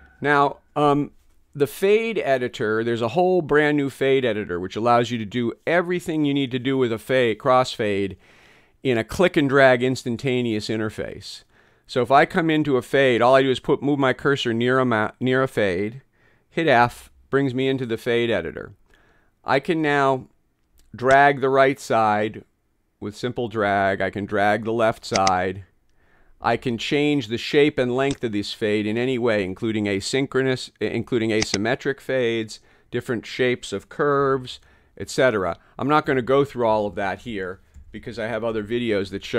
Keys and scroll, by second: 16.9 f, 34.3 t, 36.1 t, 37.3 t, 37.8 t, 38.6 t, 39.1 t.